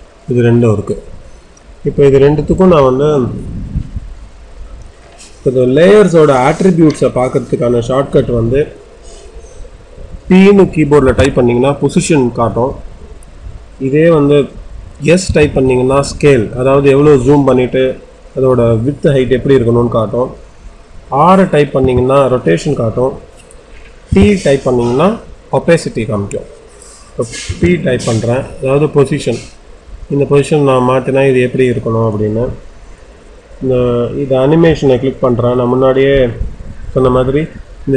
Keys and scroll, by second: 10.9 p, 15.1 s, 21.8 r, 24.0 t, 27.4 p, 28.2 p.